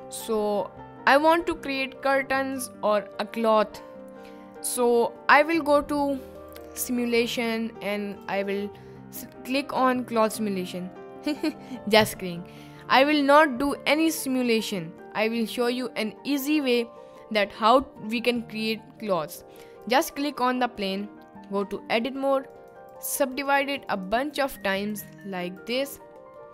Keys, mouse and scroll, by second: 1.1 click, 6.6 drag, 8.1 click, 17.9-18.3 middle drag, 18.7 middle click, 19.8 click, 21.7 Tab, 22.6 click, 23.3 click, 23.9 click, 24.6 click, 25.1 click, 26.4 middle click.